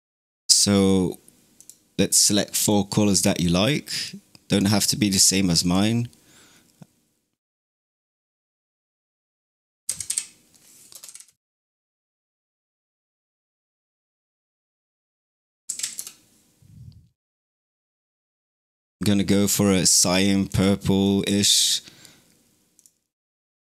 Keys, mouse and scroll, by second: 0.5 middle click, 1.4-2.6 drag, 7.3-11.0 drag, 11.0 KP_3, 12.5-15.7 drag, 15.7 KP_6, 17.7-18.6 drag, 21.5 click, 22.6 click.